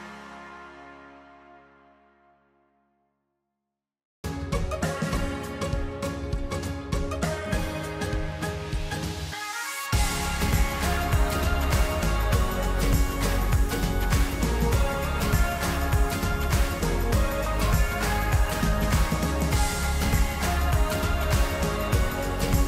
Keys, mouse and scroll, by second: 2.9-8.3 middle drag, 8.3 KP_4, 8.3 KP_1, 11.5-12.6 middle drag, 12.6 KP_7, 15.5 KP_5, 18.2 KP_1, 19.0 KP_7, 19.8 KP_1, 20.8-22.6 middle drag.